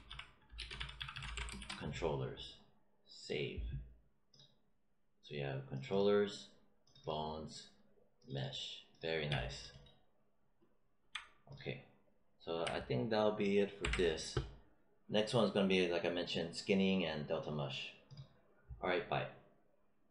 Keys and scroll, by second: 0.0-2.0 typing, 13.7 ctrl+s.